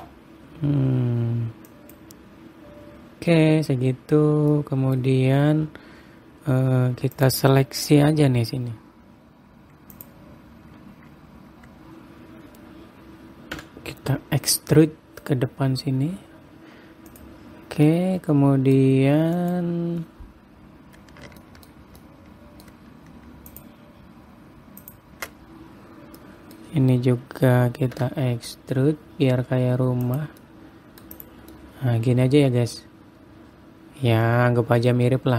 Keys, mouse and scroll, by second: 5.0 middle click, 5.7-7.0 scroll up 2, 7.7 click, 10.4 click, 14.1 e, 18.4 middle click, 19.9 click, 21.9 shift+middle click, 22.5 middle click, 24.0 shift+click, 25.3 shift+click, 26.2-26.6 scroll down 1, 26.8 middle click, 26.8 scroll down 1, 28.5 e, 31.1 middle click, 31.7 click, 32.0 middle click.